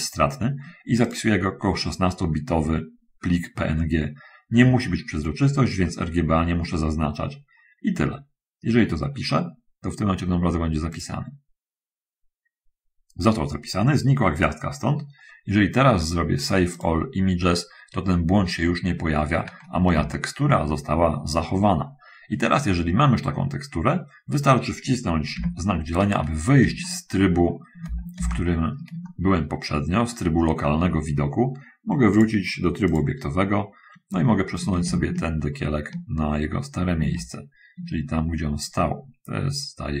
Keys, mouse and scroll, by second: 1.3 click, 11.2 click, 16.7 click, 19.5 middle click, 20.3 shift+middle click, 21.0 middle click, 22.1-23.4 middle drag, 23.5 middle click, 25.6 /, 27.1 shift+middle click, 28.4 shift+space, 29.3 shift+middle click, 32.4 click, 34.5-40.0 drag.